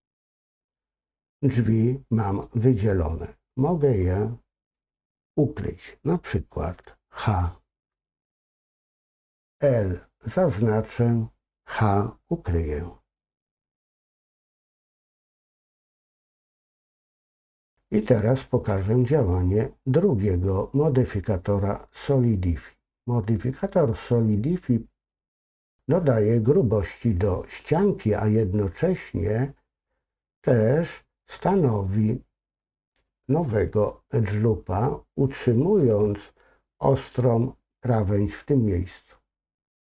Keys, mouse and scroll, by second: 14.9 middle click, 15.7-16.1 scroll up 2, 16.1 middle click, 17.0 scroll up 2, 17.1-18.5 shift+middle drag.